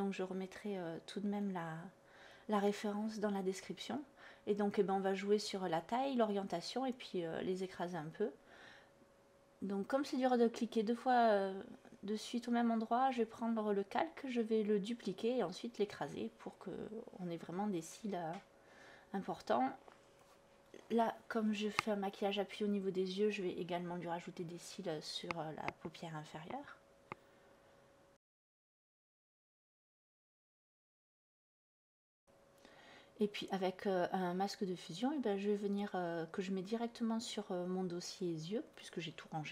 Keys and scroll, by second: 12.2 ctrl+e, 13.7-14.9 typing, 25.8 ctrl+z, 29.8 b, 39.2 x.